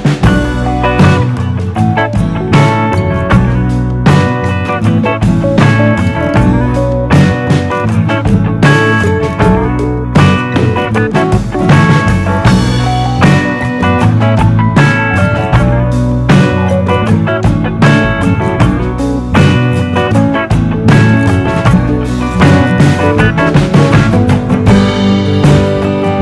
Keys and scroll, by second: 12.6 d.